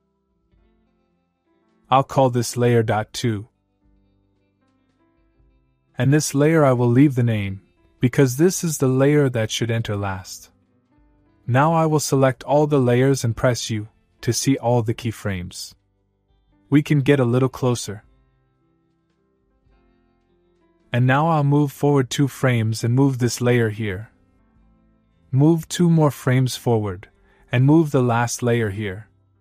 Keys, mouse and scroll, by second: 2.2 click, 3.0 Return, 3.9 click, 4.3 Return, 4.7 Right, 7.2 click, 10.3-10.8 click, 14.3 u, 15.6 click, 19.4-20.0 middle click, 20.8-21.1 click, 23.1-24.5 click, 25.3-26.6 click.